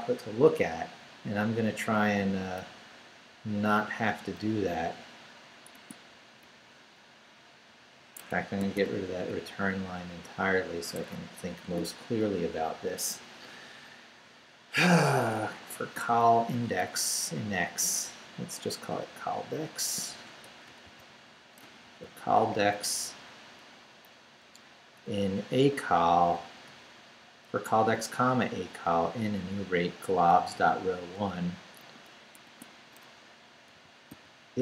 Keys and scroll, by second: 1.8 Down, 2.6 Left, 4.4 Left, 5.7 Tab, 6.4 Up, 7.1 Down, 8.1 Escape, 8.6 d, 9.3 Up, 11.0 Escape, 11.6 shift+a, 16.5 Left, 20.4 BackSpace, 20.8 c, 21.6 BackSpace, 21.8 d, 22.5 Down, 23.6 Up, 24.0 Right, 26.3 Right, 27.5 Left, 28.0 Right, 30.3 Right, 31.9 Return, 32.4 Tab, 33.7-34.6 typing.